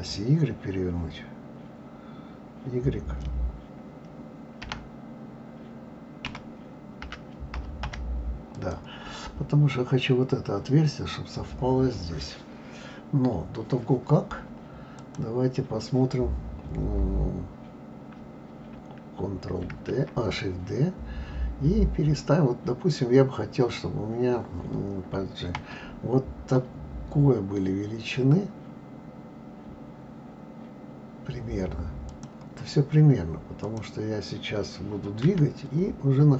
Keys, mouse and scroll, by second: 4.6 r, 13.1-13.7 scroll down 2, 13.7-15.0 scroll down 1, 15.0 click, 19.7 shift+d, 33.6 click, 35.2 g.